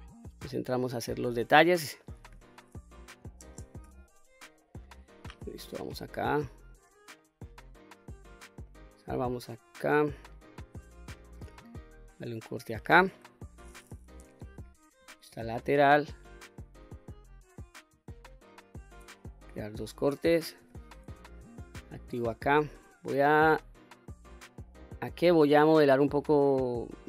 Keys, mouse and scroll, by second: 0.2-2.0 middle drag, 3.4 shift+space, 4.6 middle click, 5.3 2, 5.8 middle click, 6.6 click, 7.2-8.7 middle drag, 10.3 ctrl+r, 11.7 click, 12.4 middle click, 14.1 KP_3, 14.7-15.1 scroll up 2, 15.4 shift+middle click, 16.6 ctrl+r, 19.8 click, 20.6 q, 21.3 click, 22.7 click, 24.3 click, 26.0 click.